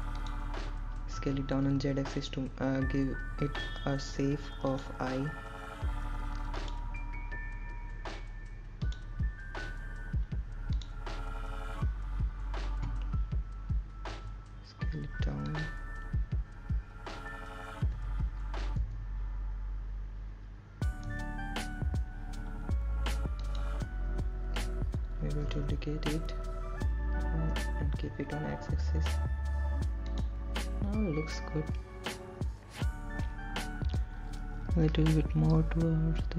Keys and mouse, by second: 0.5 KP_1, 1.9 s, 3.2 click, 4.2 s, 4.7 z, 7.7 click, 9.8 click, 17.1 s, 18.5 click, 21.0 g, 21.8 z, 24.1 x, 26.4 click, 28.5 shift+d, 31.2 x, 33.2 click.